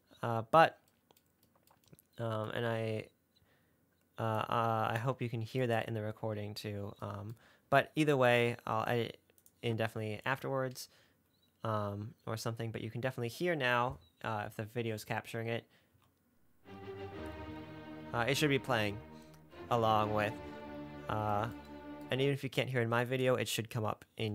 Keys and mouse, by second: 0.0 click, 0.1 middle click, 4.6 click, 9.7 click, 16.2 space, 22.3 space.